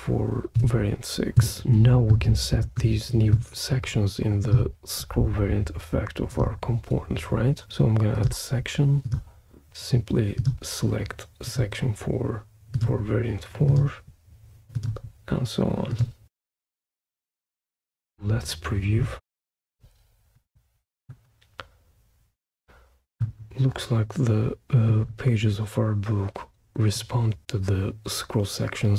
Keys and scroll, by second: 0.6 6, 1.4 Return, 19.2 super+p.